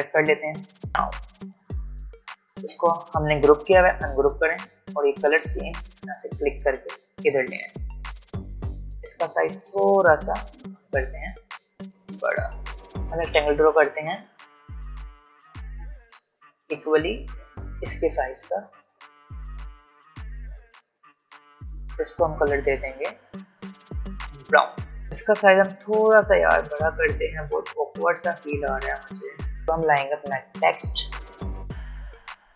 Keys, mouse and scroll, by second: 2.3-3.8 drag, 3.8 ctrl+shift+g, 4.3-8.3 drag, 10.3 alt+shift+click, 12.8 ctrl+z, 14.7 v, 16.1 m, 17.5-21.9 drag, 21.9 v, 23.2 i, 24.6-29.6 drag, 32.0 t.